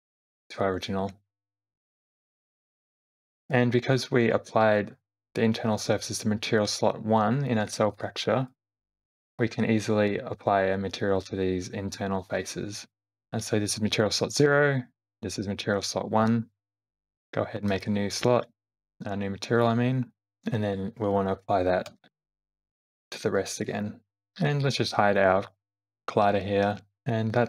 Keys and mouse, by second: 0.0 click, 1.8 space, 2.4 space, 3.7 shift+middle click, 7.9 click, 8.5 click, 9.3 middle click, 17.7 click, 19.6 click, 21.9 shift+g, 23.6 ctrl+l, 26.8 click, 26.9 space.